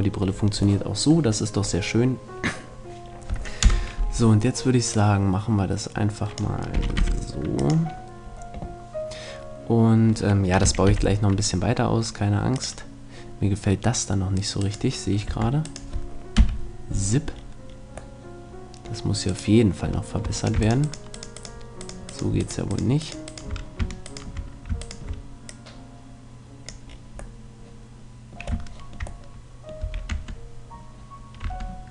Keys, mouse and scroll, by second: 0.8-2.4 middle drag, 3.0 middle click, 3.6 KP_0, 5.0-6.8 drag, 6.8 r, 7.7-9.5 drag, 10.6 r, 13.6 click, 14.7-16.4 right drag, 15.3 Tab, 16.4 KP_Decimal, 17.4 middle click, 19.3-26.6 right drag, 25.5-26.6 drag, 26.8 click, 27.5-28.9 middle drag, 29.8 a, 30.1 Tab, 31.5 Tab.